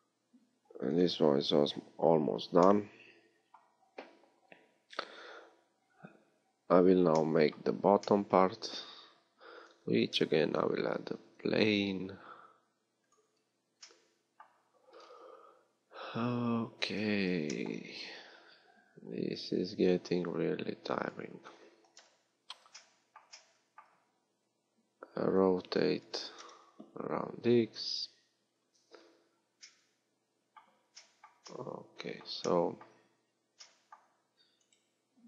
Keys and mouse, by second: 9.0 a, 9.7 Tab, 10.6 shift+a, 17.3 g, 22.0 KP_1, 25.5 r, 28.6-35.2 middle drag.